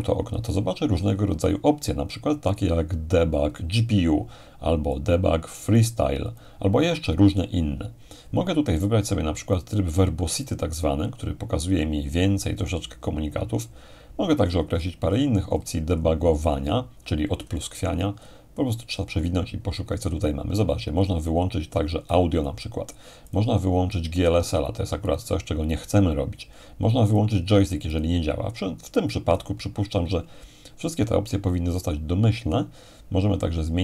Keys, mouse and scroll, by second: 2.5-4.7 drag, 4.9-6.7 drag, 6.7-8.1 scroll down 2, 9.6-11.4 drag, 12.6-14.4 scroll down 2, 14.4-20.1 scroll up 2, 20.1-21.4 scroll down 2, 21.8-26.1 drag, 27.2-29.0 drag, 32.2-33.8 scroll up 2.